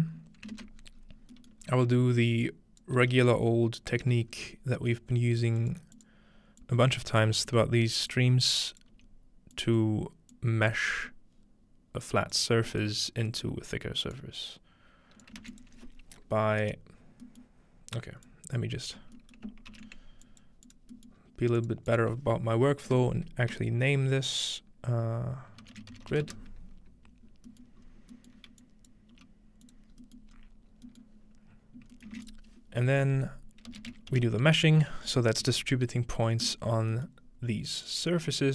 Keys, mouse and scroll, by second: 0.8-1.7 ctrl+scroll down 1, 0.9 typing, 1.7 scroll up 1, 2.5 click, 3.0 f, 4.3-4.8 scroll up 1, 4.8 g, 5.6 click, 6.0 click, 6.6 click, 7.0 scroll down 2, 7.4 scroll up 2, 8.1 click, 8.9 g, 9.6 click, 10.3 click, 12.3 click, 12.7 scroll up 1, 14.2-17.5 drag, 15.4 shift+a, 16.7-18.3 right drag, 17.1-17.6 scroll down 2, 17.6-18.3 scroll up 2, 18.3-19.1 drag, 19.7 ctrl+j, 20.3 click, 20.7 click, 21.2-22.5 scroll up 1, 22.9 F2, 25.6-26.8 typing, 27.3-27.8 scroll down 2, 27.8 scroll up 1, 28.6-31.5 drag, 29.2 g, 29.9-30.7 scroll up 1, 30.7-31.9 scroll down 1, 31.9 scroll up 2, 32.2 shift+a, 32.3-34.1 shift+drag, 33.7-34.7 typing, 35.4 Return, 36.4-38.0 drag, 37.3-38.5 scroll up 3.